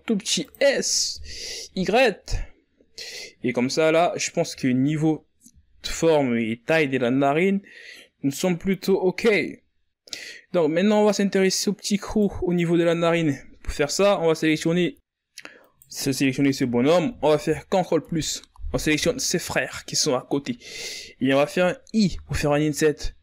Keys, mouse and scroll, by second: 2.1 KP_1, 2.7 z, 3.7-4.5 scroll down 2, 4.5-5.5 scroll up 7, 5.5 z, 6.5 z, 7.7 s, 10.1 z, 10.5-10.9 scroll down 4, 10.9-11.5 scroll up 5, 11.5-11.8 scroll down 4, 11.8 middle click, 12.5-13.0 scroll up 4, 13.0 right click, 14.3 KP_1, 15.5 z, 16.0-16.6 scroll up 2, 16.6 right click, 17.5 KP_1, 19.0 ctrl+KP_Add, 20.5-21.3 scroll up 3, 21.7 ctrl+scroll up 2.